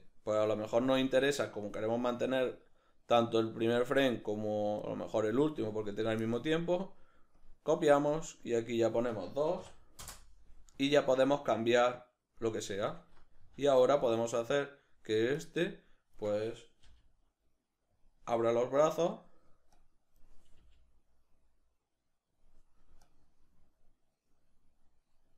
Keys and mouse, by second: 1.0-14.6 drag, 10.1 Return, 13.5 alt+q, 14.6 right click, 15.4-18.1 drag, 16.9 g, 19.0 right click, 19.8-22.5 drag, 20.6 g, 23.2-25.3 drag.